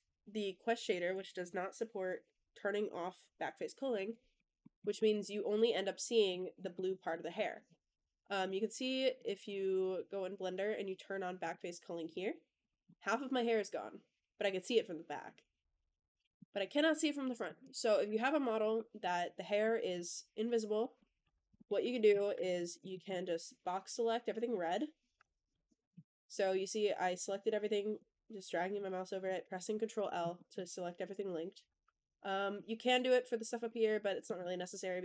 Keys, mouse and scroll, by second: 4.5 middle drag, 4.8 click, 5.1-6.2 middle drag, 6.3-6.8 shift+scroll down 2, 6.5 shift+middle drag, 7.0 middle drag, 8.2 click, 9.2 click, 9.8-10.3 drag, 11.3 click, 12.5 click, 12.7-16.2 middle drag, 17.3 click, 17.5-18.7 drag, 18.9-19.5 middle drag, 19.7 click, 20.7 middle click, 21.1 Tab, 21.4 middle click, 21.9 KP_1, 22.2 1, 22.7 shift+middle click, 22.9 click, 23.7 click, 25.4 ctrl+l, 26.3-27.9 middle drag, 28.7 middle click, 30.2 middle click, 31.0-32.5 middle drag, 33.5 middle click, 34.3 middle click.